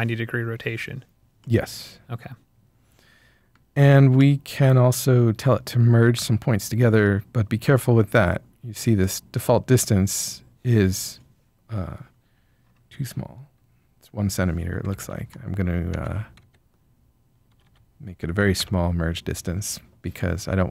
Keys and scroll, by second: 14.8 Left, 14.9 Left, 15.9 Right, 16.4 Right, 17.4 0, 17.6 0, 18.5 Return.